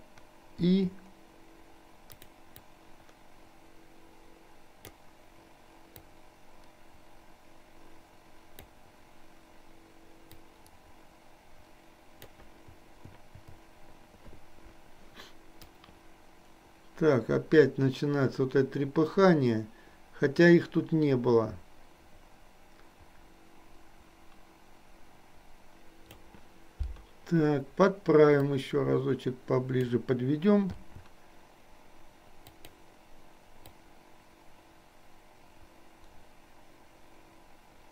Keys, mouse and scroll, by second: 2.2 click, 2.8-5.0 drag, 6.2-8.8 drag, 10.8-12.4 drag, 12.8 i, 15.7-26.3 drag, 28.4 click, 28.7-30.0 drag, 32.5 click, 33.8-37.9 drag.